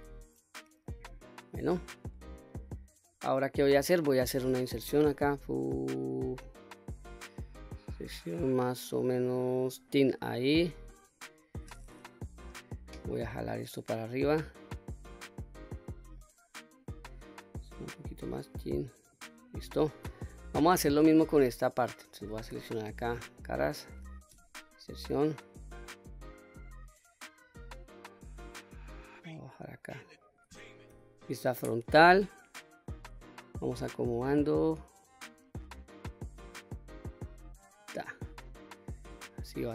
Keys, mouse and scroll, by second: 1.3-3.1 middle drag, 3.5 middle click, 4.9 i, 9.8 click, 12.4-15.5 drag, 15.8-16.2 scroll down 1, 16.2-17.4 middle drag, 17.9-19.2 drag, 19.5-19.9 scroll up 2, 19.9 middle click, 20.7 click, 21.9 shift+middle click, 22.5 3, 22.9 click, 23.4 middle click, 24.4 i, 27.5 click, 27.9 middle click, 29.1-30.4 drag, 30.9 KP_1, 32.3 click, 33.8 s, 37.7 click, 38.3 middle click, 39.0-39.4 scroll down 2, 39.4 middle click.